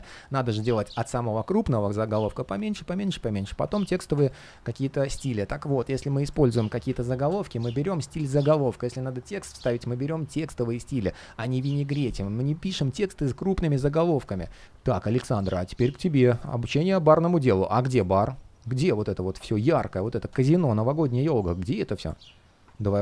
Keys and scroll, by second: 22.7 super+/.